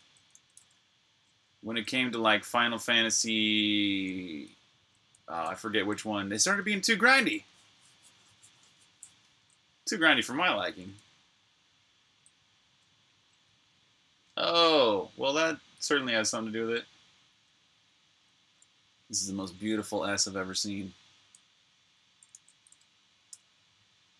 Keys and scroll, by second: 0.0-2.8 typing, 5.6 typing, 6.4 super+q, 8.5 super+Tab, 22.1 super+a, 23.2 BackSpace.